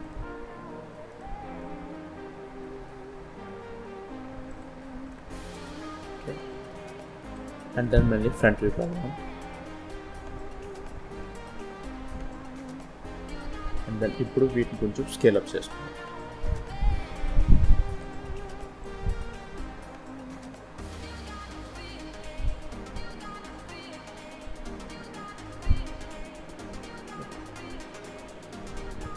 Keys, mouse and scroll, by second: 1.0 shift+click, 1.8 s, 4.7 scroll down 2, 5.0 middle click, 6.5 shift+middle click, 8.2 KP_1, 10.4 z, 11.8-12.2 scroll up 2, 12.2 scroll down 1, 13.5 click, 14.9 s, 18.7 click, 19.7 s, 22.9 scroll down 1, 23.5 z, 25.1 scroll down 1, 25.4 middle click.